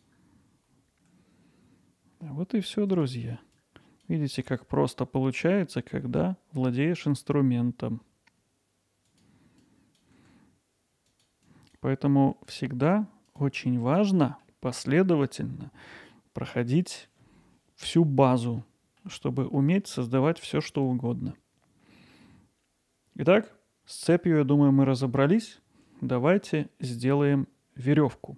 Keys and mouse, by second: 0.3 middle click, 0.8 click, 2.9 click, 3.7 click, 4.4-9.2 right drag, 9.7-10.0 drag, 11.1 click, 11.6 click, 13.3 click, 14.2 middle click, 15.3 middle click, 16.5 middle click, 18.6 middle click, 19.5 middle click, 20.5-22.1 middle drag.